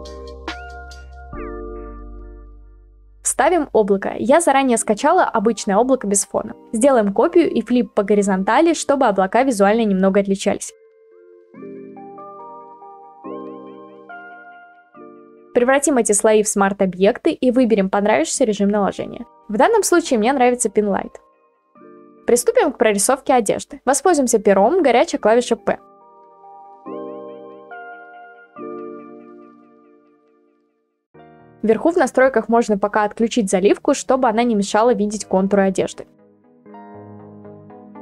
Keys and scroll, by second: 1.6 ctrl+t, 2.4 Return, 5.8 Return, 9.0 ctrl+t, 13.7 Return, 30.3-32.6 ctrl+z.